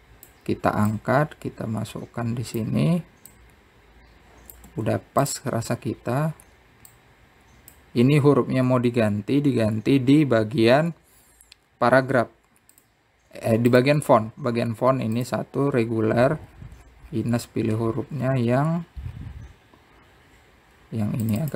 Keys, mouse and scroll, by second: 0.7 click, 2.2 click, 4.5 click, 7.2-8.1 scroll up 1, 8.1 click, 11.3 scroll up 3, 11.8-12.3 scroll down 5, 12.5-13.1 scroll up 1, 13.1 scroll down 2, 14.0-15.4 drag, 15.4 scroll down 3, 16.4 click, 17.0-18.3 drag, 18.8 click.